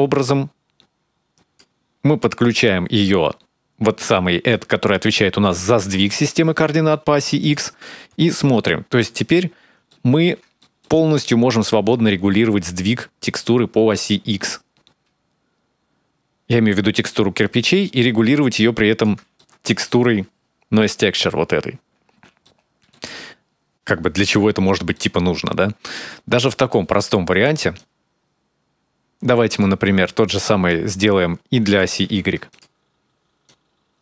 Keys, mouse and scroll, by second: 2.3-4.3 scroll down 4, 4.3 click, 6.7 middle click, 7.3 ctrl+shift+click, 8.2-8.9 scroll up 4, 9.2-9.7 scroll down 2, 9.7 shift+middle click, 10.4 middle click, 10.9-11.7 scroll up 4, 11.7 shift+click, 19.2 middle click, 20.9-21.4 scroll down 3, 21.4 scroll up 2, 21.8 scroll down 2, 22.2 shift+middle click, 24.3-26.0 scroll down 3, 24.7 middle click, 26.2 click, 26.9 click, 27.6 click, 30.5 click, 31.8 shift+d, 33.3 click.